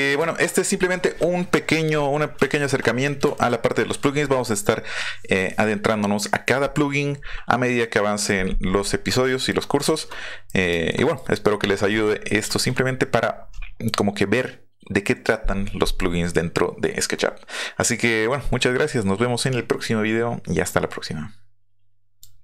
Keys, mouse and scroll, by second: 2.5-3.0 shift+middle drag, 3.3-3.6 shift+middle drag, 9.2 middle click, 9.8-10.4 middle drag, 10.9 shift+middle drag, 12.0-12.3 middle drag, 22.2 click.